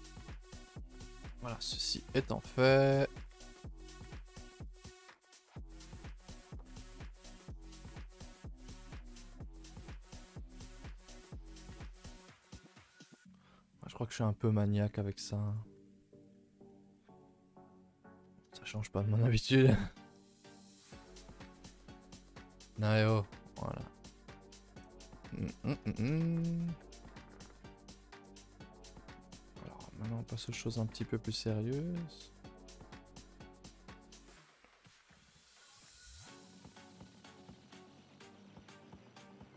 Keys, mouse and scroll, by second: 0.3 shift+middle drag, 0.5 scroll up 1, 0.7 a, 0.9 a, 1.6 alt+click, 1.9 s, 3.2 alt+click, 3.5 s, 4.4 g, 5.4 r, 6.0 g, 6.7 Tab, 7.0 scroll down 1, 7.2 a, 7.3 a, 7.6 shift+middle click, 7.7 scroll up 3, 8.0 Tab, 8.5 alt+click, 8.7 s, 9.7 alt+Left, 10.2 s, 11.7 alt+Left, 12.0 s, 12.5 g, 13.3 g, 15.1 s, 16.2 z, 16.3 Tab, 16.7 a, 16.8 a, 16.9-17.5 scroll down 4, 17.5-17.9 shift+middle drag, 17.9 scroll up 2, 18.2 Tab, 18.5 shift+middle click, 18.7-19.0 scroll up 2, 20.0 z, 20.7 alt+click, 21.2 alt+click, 22.7 s, 24.3 scroll down 3, 24.5 shift+middle click, 24.7 scroll up 1, 24.8-27.2 typing, 25.4 shift+middle click, 25.6 scroll up 2, 26.2 shift+middle click, 27.0 click, 28.6 click, 28.7 g, 29.7 click, 30.6 click, 30.8 g, 32.2 click, 32.4 g, 33.6 click, 33.8 g, 35.2 ctrl+z, 35.4 a, 35.5 a, 35.7 3, 36.6 click, 37.4 2, 37.7 click, 38.6 e.